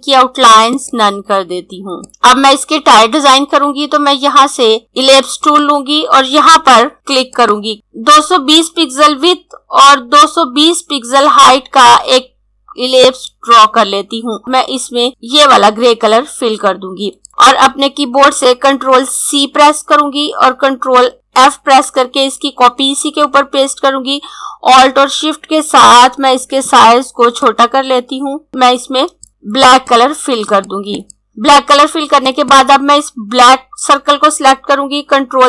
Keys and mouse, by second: 4.8 click, 7.3 click, 7.5-8.7 typing, 12.9 click, 19.6 ctrl+c, 24.1 alt+Num_Lock, 27.3 click, 29.3 click, 35.0 ctrl+Num_Lock.